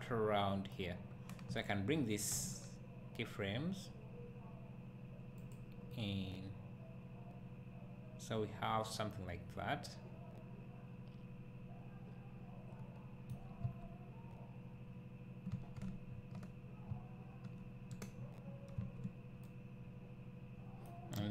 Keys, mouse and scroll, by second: 1.6 click, 2.3 g, 6.0-21.3 right drag, 13.6 space, 18.8 space.